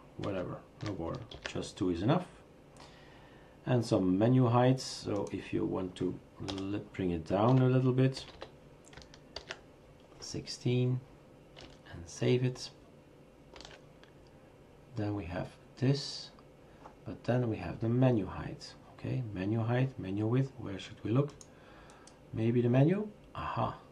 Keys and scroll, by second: 0.2 ctrl+z, 1.3 ctrl+s, 6.5 BackSpace, 7.7 Delete, 7.9-9.0 typing, 9.4 ctrl+s, 13.5 shift+super+r, 13.9 shift+super+r.